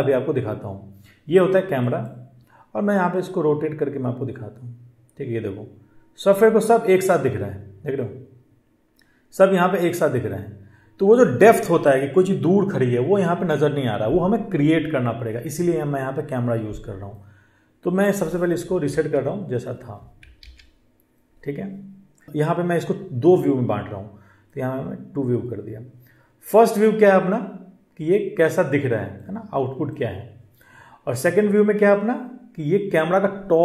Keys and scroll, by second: 18.7 ctrl+z, 20.2 ctrl+z.